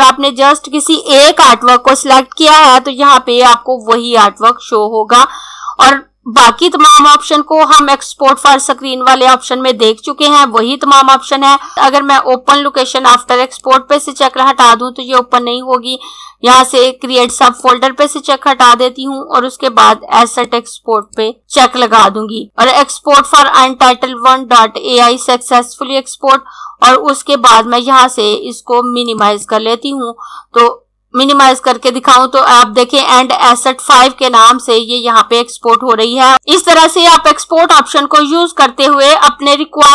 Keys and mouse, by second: 13.2 click, 17.2 click, 20.3 click, 29.0 click.